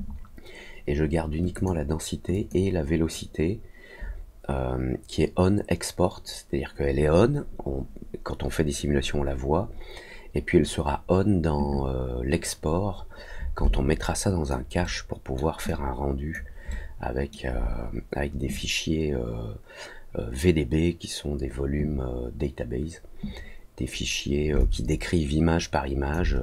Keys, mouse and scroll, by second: 1.5 click, 2.3 click, 13.7 alt+click, 14.8 alt+middle click, 15.6 alt+click, 16.6 alt+middle click, 24.5-26.1 alt+drag.